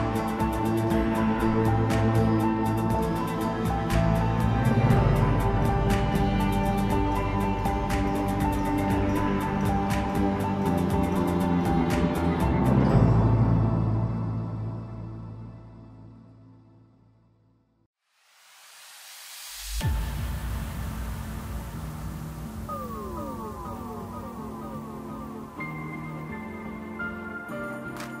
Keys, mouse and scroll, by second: 0.0 KP_1, 0.7-1.1 scroll up 1, 1.1 scroll down 1, 1.4-2.6 middle drag, 2.6 KP_1, 4.9-7.6 drag, 7.6-8.7 middle drag, 8.7 KP_Divide, 9.0 KP_7, 9.7 Tab, 10.0-10.5 scroll down 2, 10.5-12.8 right drag, 12.8-15.9 drag, 16.1-16.5 scroll up 1, 16.5 scroll down 3, 16.8-17.8 middle drag, 17.8 KP_7, 19.7-22.8 drag, 24.5-25.3 scroll up 4, 25.3 2, 26.2 click, 26.3 click, 27.2 shift+click, 27.3 shift+click.